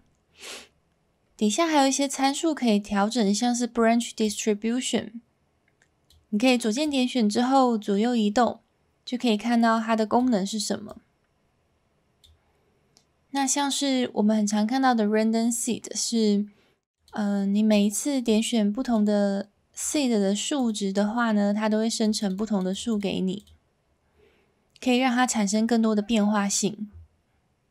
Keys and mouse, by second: 4.3-6.1 drag, 6.8-10.2 drag, 11.0-12.2 drag, 17.7 click, 18.8 click, 19.8 click, 22.0 click, 22.4 click, 22.7 click, 22.9 click, 23.4 click.